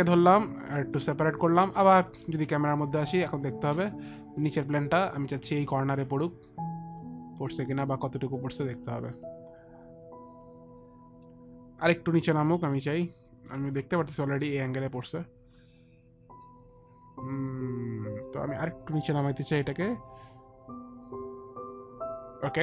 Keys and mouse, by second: 0.5 click, 2.4 click, 3.5 click, 4.8 click, 7.2 click, 13.6 click, 18.4 click.